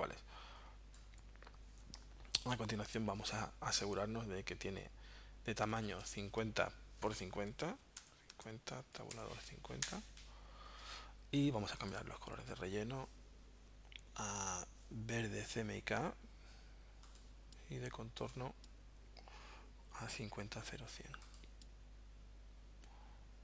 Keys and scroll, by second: 7.5-9.6 typing, 9.8 Return.